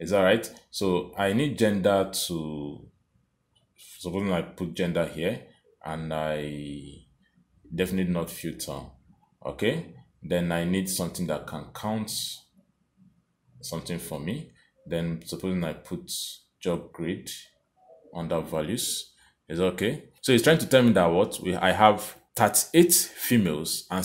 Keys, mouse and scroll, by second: 0.7 click, 8.1 click, 11.2 click, 16.2 click.